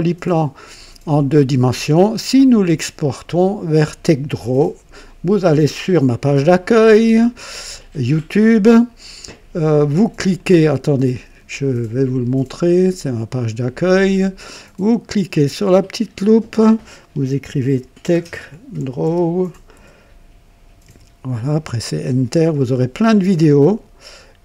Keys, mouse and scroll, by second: 10.3 click, 12.6 click, 15.6 click, 17.1-19.7 typing, 20.8-21.8 typing, 23.1-23.6 scroll down 2, 24.3-24.4 scroll down 1.